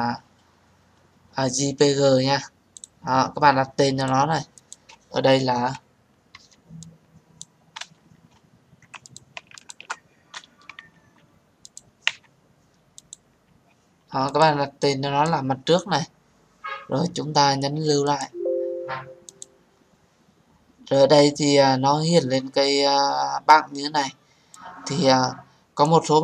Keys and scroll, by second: 10.8 Delete.